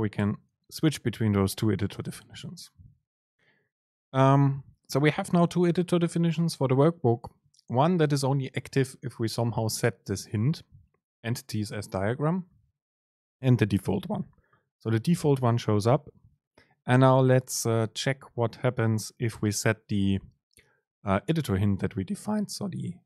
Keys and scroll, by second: 0.3 ctrl+shift+super+F9.